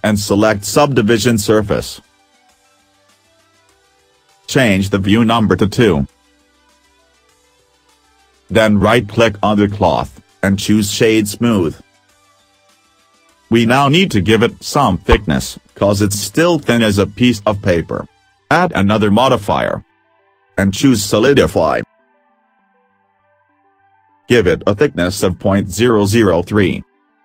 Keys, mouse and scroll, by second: 6.4 click, 6.5 middle click, 7.4 scroll up 2, 9.0 right click, 13.9 middle click.